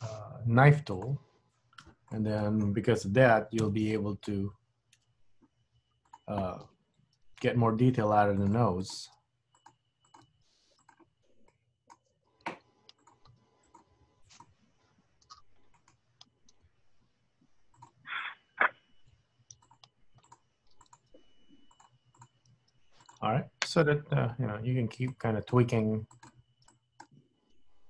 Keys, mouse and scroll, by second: 2.2 middle click, 3.7 1, 4.1 middle click, 5.0 KP_1, 6.2 click, 7.0 g, 8.9 click, 9.1 g, 10.2 click, 10.5 g, 11.6 middle click, 12.2-13.2 scroll up 1, 13.2 click, 13.3 g, 14.5 click, 14.5 g, 16.7 KP_3, 17.5 g, 18.3 click, 18.5 g, 19.7 click, 19.9 g, 20.9 click, 21.0 g, 22.3 click, 22.6 g, 24.0 scroll up 1, 24.1 scroll down 1, 24.3 scroll down 3, 25.1 click, 25.7 g, 26.9 click, 27.1 g.